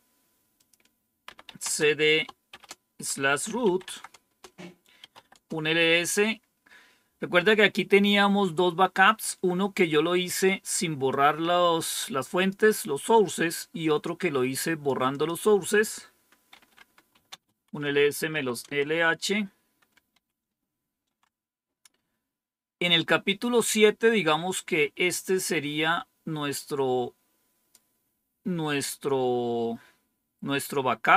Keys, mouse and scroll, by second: 0.5 click, 1.0-5.6 typing, 11.0-12.4 drag, 14.0 click, 15.0 click, 16.4-18.7 typing, 20.1 ctrl+-, 25.0-27.7 drag.